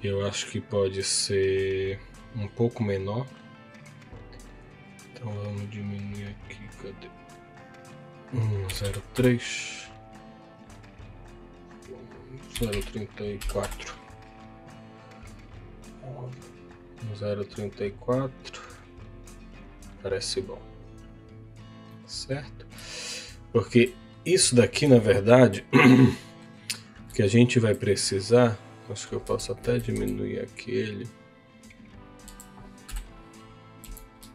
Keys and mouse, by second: 8.5-11.5 drag, 21.8 middle click, 22.9 shift+middle click, 25.0 shift+middle click, 26.1 middle click, 27.2 shift+middle click, 27.8 click, 29.2 Tab, 29.6 a, 29.9 s, 32.0 click, 32.6 Tab, 32.9 KP_7, 33.8 z.